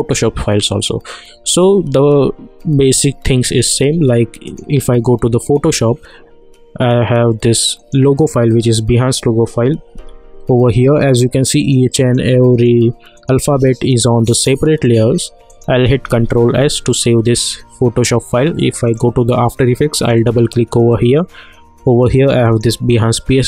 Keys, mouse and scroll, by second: 4.4 click, 7.7 click, 9.9 v, 11.6 click, 16.0 ctrl+s, 18.8 click, 22.4 click.